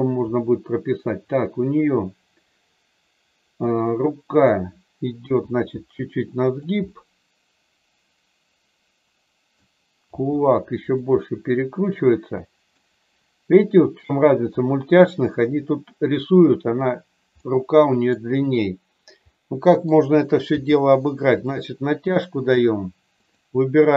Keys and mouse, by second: 0.4-3.7 middle drag, 4.3 click, 5.1 g, 6.4 click, 6.9-9.5 middle drag, 10.0 r, 11.1-12.8 middle drag, 17.4 middle click, 19.4 middle click, 20.5 g, 21.4 click, 22.2 middle click, 23.2 click.